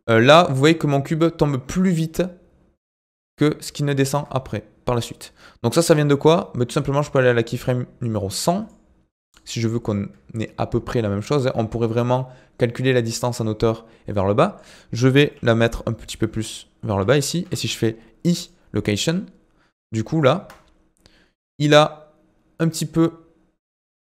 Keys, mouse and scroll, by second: 4.1 space, 6.3-12.8 drag, 14.1-15.2 shift+middle drag, 15.2 g, 19.1-20.3 drag, 20.3 space.